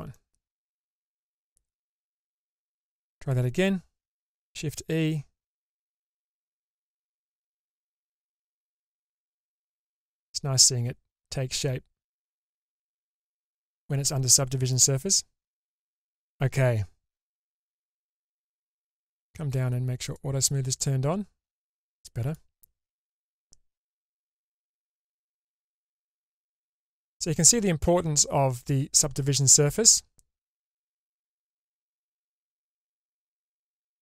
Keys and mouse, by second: 0.3-2.6 middle drag, 4.9 shift+e, 8.6 shift+e, 9.2-14.9 middle drag, 19.2 click, 20.2 click, 20.9-22.5 middle drag, 24.3 Tab, 25.6-32.8 middle drag.